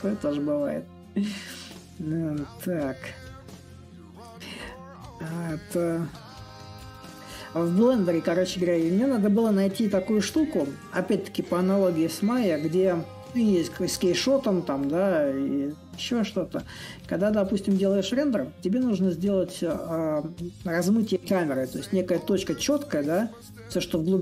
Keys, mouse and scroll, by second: 5.8 click, 7.6-12.7 drag, 13.6-18.7 drag, 19.2-24.2 drag.